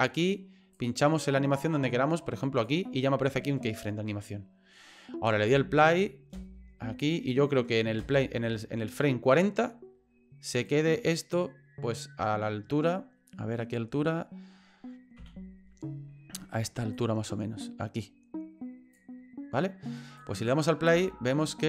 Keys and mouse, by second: 0.3 click, 1.6-2.7 drag, 5.5 space, 6.3 space, 8.0 space, 10.7-13.0 drag, 13.4 middle click, 15.2 KP_3, 16.9-19.0 drag, 20.2 click, 20.9 space.